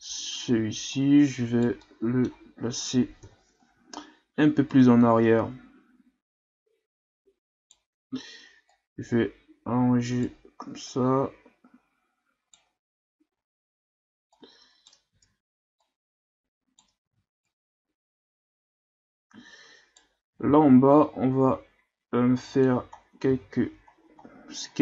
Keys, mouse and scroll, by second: 0.9 right click, 1.8-3.2 middle drag, 3.2 KP_3, 4.7 right click, 8.7 right click, 10.9 right click, 13.4-14.3 ctrl+scroll down 3, 14.3 right click, 15.1 ctrl+z, 15.8 right click, 17.0 ctrl+z, 17.4 right click, 20.5 alt+s, 22.9-23.3 scroll down 1, 23.3 Tab, 23.6 a, 23.9-24.6 scroll down 1, 24.6-24.8 scroll up 2.